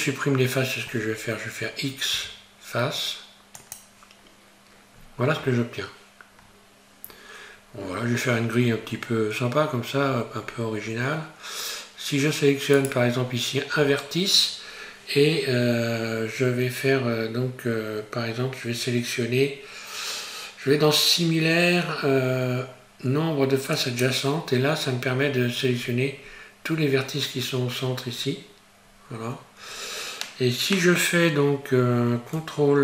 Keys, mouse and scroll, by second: 1.5-2.1 scroll down 3, 5.0-6.2 scroll up 5, 6.4 scroll down 1, 6.5-7.0 scroll down 1, 7.0 scroll down 3, 7.8 scroll down 1, 7.9-8.5 scroll down 1, 8.7 scroll up 2, 9.0 scroll down 1, 9.1-10.1 scroll down 1, 10.2-10.9 scroll up 5, 10.9 scroll down 2, 12.8 right click, 14.8-15.7 scroll down 4, 25.2-25.9 scroll down 3, 25.8-28.4 scroll up 5, 28.4-28.9 scroll up 2, 28.9 scroll up 1.